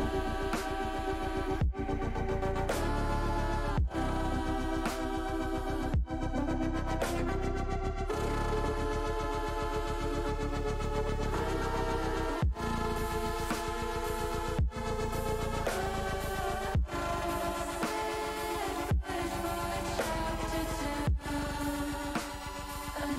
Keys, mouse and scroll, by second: 0.2 middle click, 2.5 middle click, 4.0 shift+click, 5.0 middle click, 6.0 middle click, 6.2 middle click, 7.7 shift+click, 8.1 middle click, 9.6 shift+click, 10.1 shift+click, 10.6 middle click, 12.0-14.7 drag, 16.7 click, 17.5 click, 19.2 click, 21.5 click, 22.6-23.1 typing.